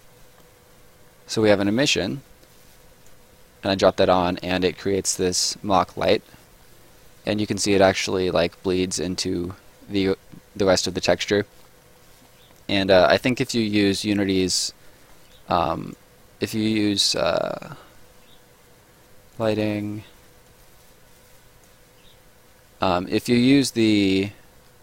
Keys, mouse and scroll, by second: 1.4 click, 4.3 middle click, 4.5 scroll up 1, 5.1 right click, 5.4 scroll up 1, 5.6 middle click, 6.0 right click, 6.4 middle click, 10.8 scroll down 1, 11.0 middle click, 11.8 scroll down 1, 11.9 middle click, 14.5 right click, 14.9 middle click, 15.8 click, 19.4 click.